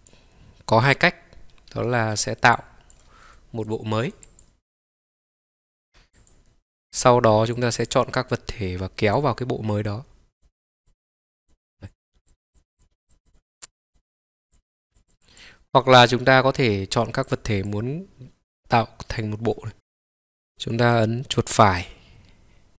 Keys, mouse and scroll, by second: 5.1 click, 6.2 click, 7.6 click, 9.2-10.8 drag, 10.8-11.6 drag, 11.8 click, 12.2 click, 12.5 click, 12.7 shift+click, 13.1 click, 13.2 click, 13.6 click, 14.2 scroll down 1, 14.5 click, 14.9 click, 15.0 click, 15.2 click, 15.5-19.8 drag, 20.6 right click.